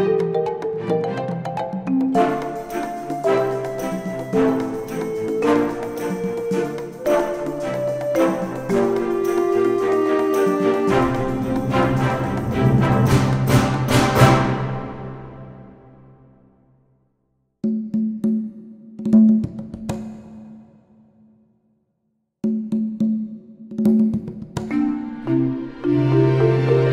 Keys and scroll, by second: 0.1 ctrl+shift+d, 22.6 ctrl+shift+d, 23.0 ctrl+shift+KP_Multiply, 26.3 ctrl+s.